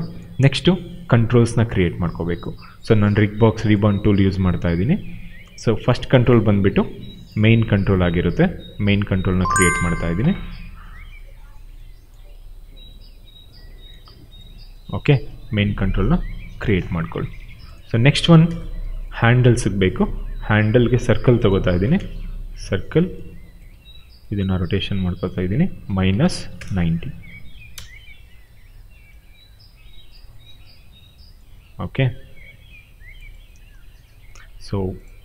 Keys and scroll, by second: 8.0 r, 9.4 space, 14.0 q, 15.3 w, 18.2 space, 21.7 space, 23.6 e, 25.5-26.7 typing, 28.4 w, 30.4 f, 31.5 w.